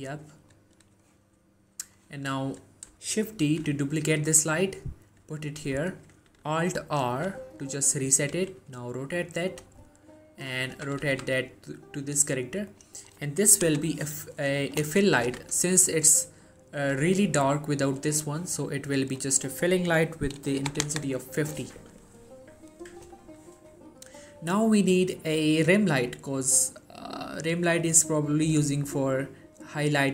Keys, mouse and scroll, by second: 1.3-2.0 scroll down 1, 2.0 click, 3.5 shift+d, 5.8 click, 7.2 alt+r, 8.4 r, 9.6 click, 9.9-10.6 scroll down 1, 10.9 typing, 12.8 click, 15.3 z, 15.8-16.3 scroll up 1, 16.9 g, 18.3 right click, 19.3 click, 26.2-27.8 scroll up 1.